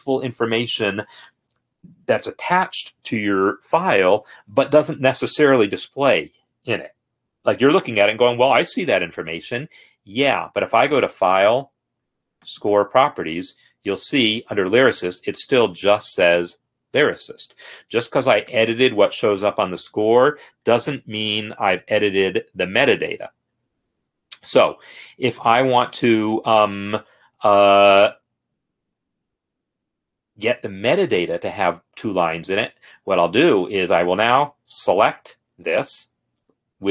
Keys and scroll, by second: 34.6 ctrl+a.